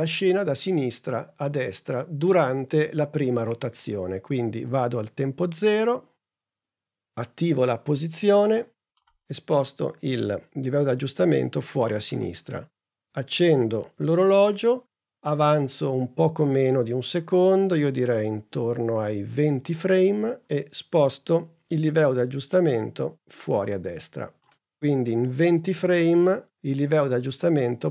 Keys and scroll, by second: 7.7 p.